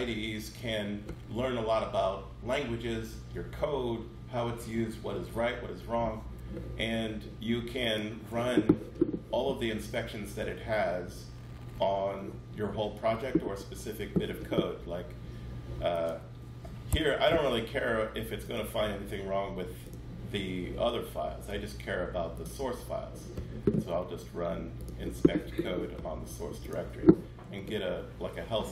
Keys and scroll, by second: 16.7 Escape.